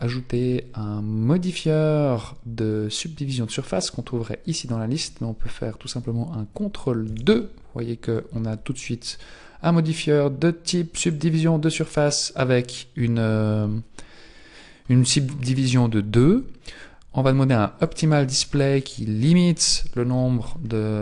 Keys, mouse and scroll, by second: 0.3 click, 7.1 ctrl+2, 11.1 click, 15.2-15.9 scroll up 1, 15.9-17.8 scroll down 1, 17.8 click.